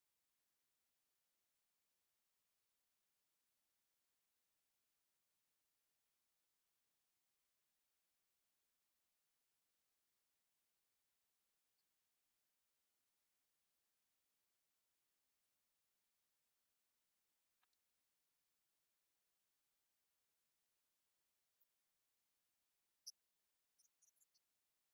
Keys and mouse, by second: 1.4-5.2 drag, 6.8 middle click, 18.4-24.9 drag.